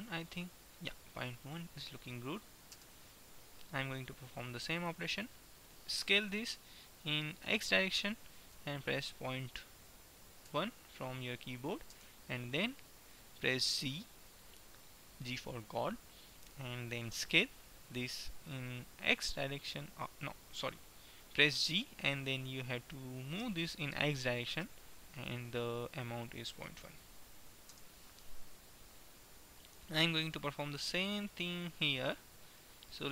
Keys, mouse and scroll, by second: 5.0-6.8 drag, 6.1 s, 13.8 g, 21.6 g, 29.8-31.5 typing, 31.0-33.1 middle drag.